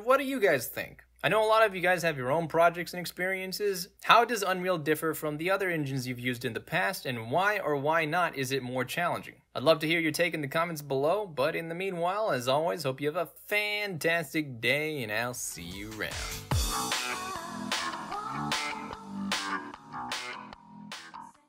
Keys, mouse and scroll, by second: 9.8-16.4 middle drag.